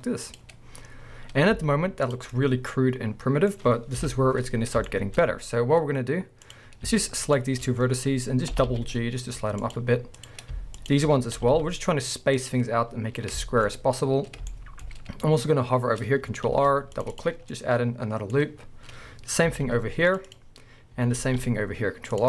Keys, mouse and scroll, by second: 0.4 click, 0.7 scroll down 1, 1.5 z, 2.3 middle click, 4.0 KP_1, 4.6 scroll up 1, 4.9 shift+middle click, 6.4 click, 7.2 shift+click, 8.5 g, 10.1 click, 10.8 shift+click, 11.3 g, 12.5 click, 13.1-13.4 scroll down 1, 13.4-14.5 shift+middle drag, 13.7 scroll up 1, 16.5 ctrl+r, 17.1 middle click, 17.2 click, 17.9-19.5 middle drag, 19.5 ctrl+r, 20.4 click, 21.2 ctrl+r.